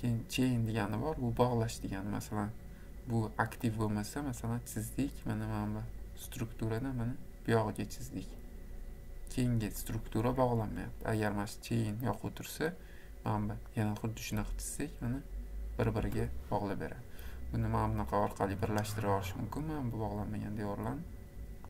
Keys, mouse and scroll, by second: 1.5 scroll, 3.8 click, 4.6 click, 6.5 click, 7.1 click, 9.9 click, 11.7 click, 12.0-12.5 scroll, 12.5 middle click, 12.6 middle click, 13.9 click, 14.5 click, 15.4 click, 16.1 Escape, 18.9 click, 19.5 click, 20.5 click.